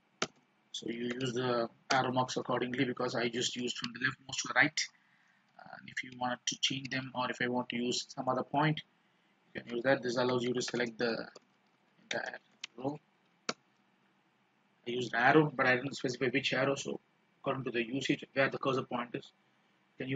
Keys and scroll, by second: 2.9 alt+a, 3.1 alt+p, 3.5 alt+c, 3.6 alt+a, 5.6 alt+p, 7.0 alt+o, 7.2 alt+c, 7.3 alt+a.